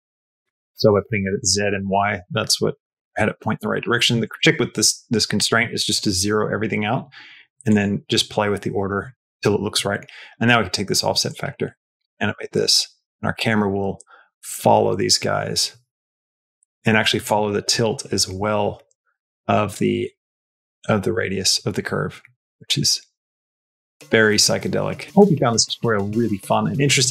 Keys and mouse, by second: 5.8 click, 7.5 click, 11.1-17.1 drag, 18.8-25.0 drag, 25.0 space.